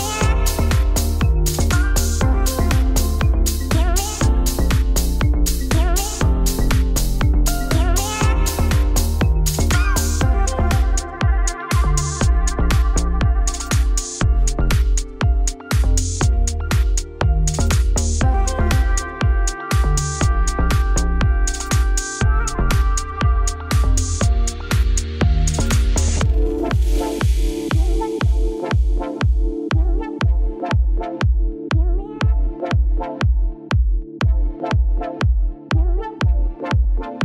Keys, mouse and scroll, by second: 1.6 click, 1.9 click, 2.8 KP_Decimal, 3.4-4.4 right drag, 4.4-5.5 drag, 5.6 middle click, 6.2 click, 6.4 click, 6.6 middle click, 7.0 shift+click, 7.7 scroll down 7, 8.0 shift+middle click, 8.5 click, 9.6 shift+click, 10.6 ctrl+l, 11.4 click, 11.7 KP_Decimal, 12.1 scroll down 5, 12.5 middle click, 12.7 shift+click, 13.2-14.9 shift+drag, 14.9 right click, 15.4 click, 15.7 right click, 16.1 click, 16.2 right click, 16.6 click, 16.7 right click, 17.2-18.4 scroll down 4, 18.4-18.8 scroll down 1, 18.8-21.4 middle drag, 19.4-20.0 scroll up 2, 21.4 scroll down 3, 21.6 shift+middle click, 22.2 click, 28.5-30.0 shift+drag, 30.0 KP_Decimal, 30.3 middle click, 30.5-31.1 scroll up 3, 31.1-32.3 middle drag, 32.5-33.7 middle drag, 33.7 click, 34.7 click, 34.9-35.2 scroll down 1, 35.2-36.3 scroll up 4, 36.3 scroll up 1, 36.4-37.0 scroll down 4, 37.0 shift+middle click.